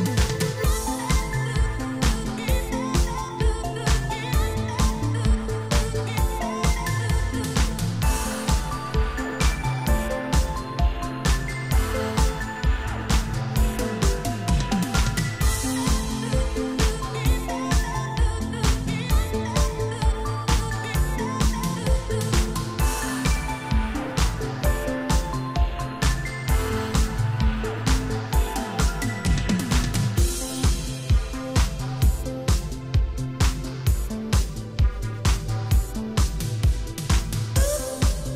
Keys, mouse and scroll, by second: 1.1 click, 1.2 click, 1.8 g, 2.6 click, 2.7 click, 3.0 click, 3.8 shift+space, 4.6 Escape, 5.1 shift+space, 5.9 Escape, 6.3 shift+space, 7.0 Escape, 7.3 scroll down 3, 7.5 middle click, 8.9 shift+Left, 9.3 shift+space, 12.1 Escape, 12.5 space, 13.2 Escape, 13.5 shift+space, 17.0 Escape, 18.7 click, 24.6 click, 26.3 click, 30.5 ctrl+c, 30.9 Down, 31.2 ctrl+v, 31.8 Down, 32.6 shift+space, 34.0 Escape, 35.9 click.